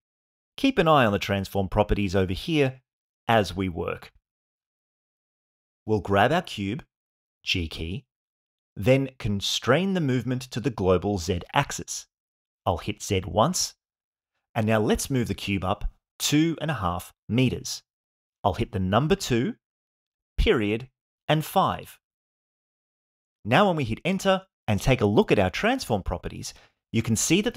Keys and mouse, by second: 5.6 g, 10.8 z, 18.7 KP_2, 20.3 KP_Decimal, 21.6 KP_5, 24.2 Return, 25.0-26.2 middle drag, 26.5-27.5 shift+middle drag.